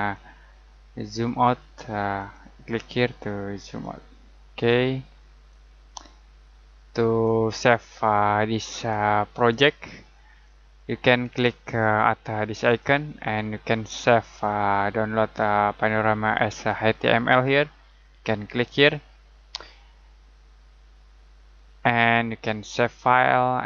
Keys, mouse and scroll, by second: 10.8-12.6 scroll up 1, 12.6 click, 21.0 click, 22.8 click.